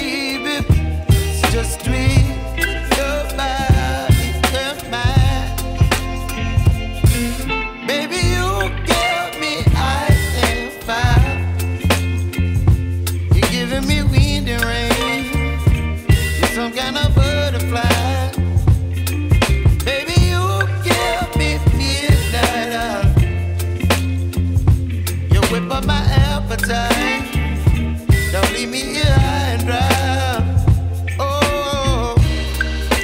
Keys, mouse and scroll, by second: 2.2 click, 4.9 Escape, 5.2 click, 6.1 ctrl+k, 7.5 click, 9.1 right click, 9.4-9.9 scroll down 1, 9.9-10.3 scroll up 1, 10.9 click, 11.1 right click, 11.8 click, 13.1 right click, 13.3 scroll down 1, 13.6-14.1 scroll up 1, 14.1 right click, 14.5 click, 14.9 right click, 15.4 click, 15.7 right click, 16.2 click, 17.5 right click, 17.8 click, 18.0 right click, 18.6 click, 19.7 right click, 19.9-20.3 scroll down 1, 20.3 scroll up 1, 21.0 click, 21.3 right click, 21.9 click, 22.8 right click, 23.1 click, 23.3 right click, 23.9 click, 25.1 right click, 25.3 scroll down 1, 25.6-27.1 right drag, 27.1 Tab, 27.8-28.2 scroll up 1, 28.2 right click, 28.8 Tab.